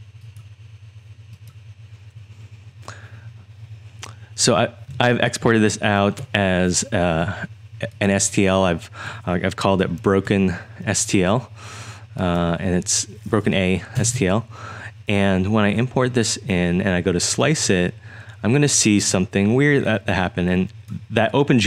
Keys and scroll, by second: 5.0 super+Tab, 10.1 super+i, 14.0 Return.